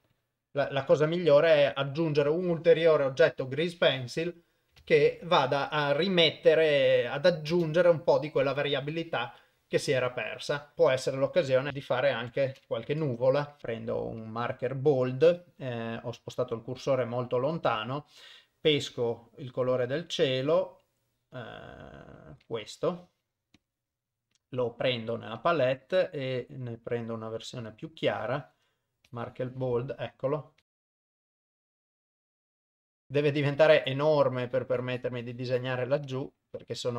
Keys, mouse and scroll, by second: 0.0 click, 0.2 click, 1.8 click, 5.3 ctrl+s, 6.6 click, 7.6 shift+space, 10.7 shift+Left, 10.7 shift+space, 10.9 KP_0, 11.7 shift+middle click, 11.7 KP_7, 12.0 shift+right click, 12.9 KP_0, 13.6 click, 20.2 click, 22.5 click, 23.6 click, 24.4 click, 29.1 click, 30.6 click, 30.8 click, 31.1 click, 31.2 click, 31.4 f, 31.6 click, 31.7 click, 32.1 click, 32.2 click, 32.3 click, 32.4 click, 32.6 click, 33.0 f, 33.6 click, 34.1 click, 34.6 click, 35.0 click, 35.6 click, 36.1 click.